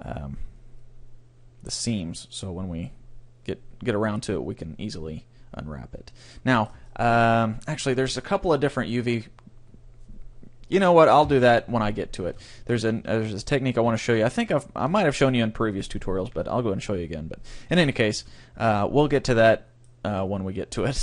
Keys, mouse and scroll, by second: 6.3-8.7 middle drag, 11.3 Tab, 11.7 middle click, 12.5-14.3 middle drag, 13.0 a, 13.4-15.3 right drag, 18.2 a, 18.5 scroll up 1, 18.8-21.0 middle drag.